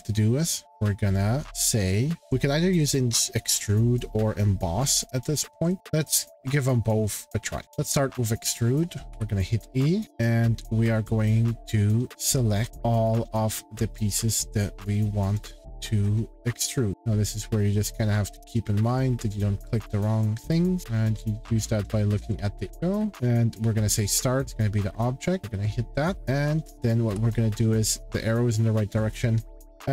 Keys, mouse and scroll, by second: 0.7 click, 3.2 click, 5.8 click, 8.3 click, 9.1 e, 9.6-10.9 scroll, 10.0 click, 13.0 click, 14.9 click, 15.4 click, 15.8-17.0 scroll, 16.9 click, 17.0 click, 17.8 click, 18.8-19.1 scroll, 19.8 click, 20.5 click, 20.8 click, 21.6 click, 22.1-23.1 scroll, 22.7 click, 23.9 click, 24.4 click, 24.9 scroll, 25.4 click, 27.1 shift+middle click.